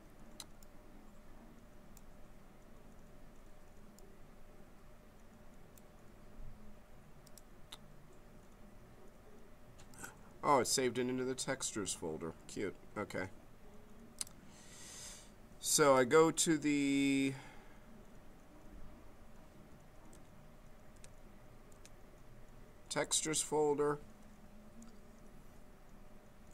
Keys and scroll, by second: 20.1 t.